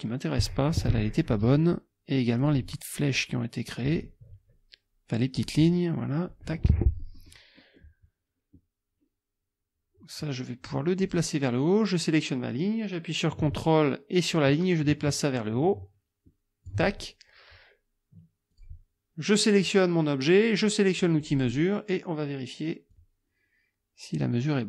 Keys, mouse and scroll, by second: 1.4 Delete, 2.4 click, 2.6 Delete, 3.1 click, 3.9 Delete, 5.3 click, 5.6 Delete, 6.7 click, 7.6 click, 11.0 click, 14.6-16.9 ctrl+drag, 18.5 click, 21.2 click, 22.9-24.6 drag.